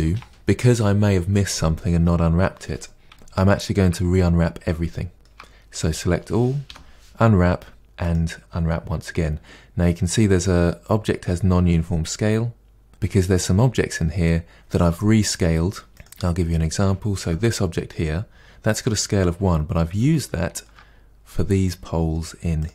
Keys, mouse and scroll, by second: 0.8-1.7 scroll down 2, 1.7-2.8 scroll down 5, 3.1-4.4 shift+middle drag, 4.4-4.9 scroll down 1, 4.9 shift+middle click, 5.9 a, 8.1 u, 15.9 Tab, 16.0 click, 17.2 KP_Decimal, 17.9-19.5 scroll down 4, 19.5-19.9 scroll down 2, 19.9-20.8 shift+middle drag, 20.8-21.3 scroll down 2, 21.3-22.6 middle drag, 22.6 click.